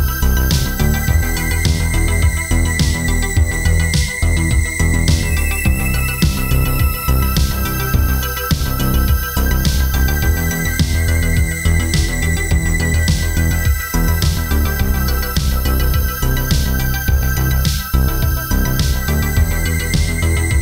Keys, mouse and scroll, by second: 1.0 right click, 2.3 click, 6.0 right click, 6.7 click, 8.8 click, 9.3 ctrl+z, 9.4 click, 10.7 click, 12.4 click, 13.3 click, 14.9 click, 17.1 click, 18.5 click.